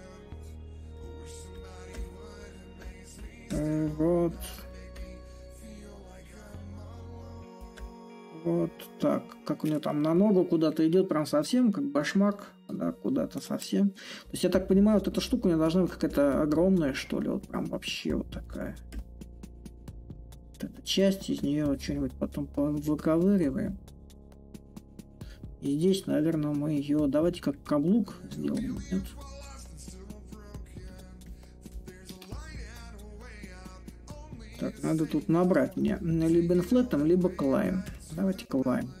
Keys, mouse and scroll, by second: 5.3 click, 6.2-10.4 drag, 11.0-20.8 middle drag, 21.6-26.7 drag, 27.2-31.9 drag, 32.1-39.0 ctrl+drag.